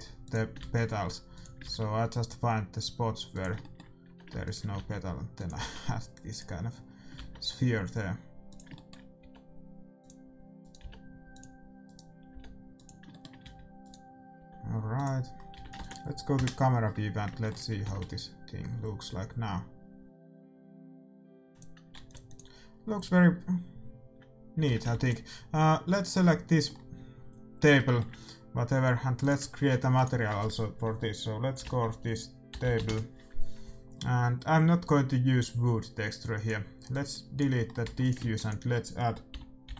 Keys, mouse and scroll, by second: 0.5 shift+d, 1.6 shift+d, 3.5-5.2 middle drag, 4.0 g, 4.7 shift+d, 5.6 shift+d, 7.1 shift+d, 8.7-10.6 middle drag, 9.1 g, 10.6-13.0 right drag, 10.7 g, 12.3 g, 13.0-14.7 middle drag, 13.5 a, 14.3 g, 14.7 right click, 15.5 a, 15.8 ctrl+s, 16.3 KP_0, 17.5-19.4 middle drag, 19.4 shift+z, 21.7-24.3 drag, 22.1 ctrl+s, 24.8 shift+z, 24.9 ctrl+s, 25.9 right click, 27.7-29.1 middle drag, 29.1-31.7 drag, 34.1-35.8 middle drag, 36.2-39.7 drag, 37.8 x, 38.2 shift+a.